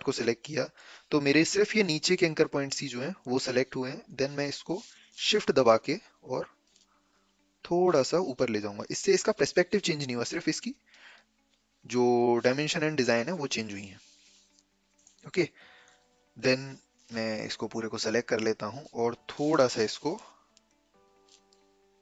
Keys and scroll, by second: 5.2 a.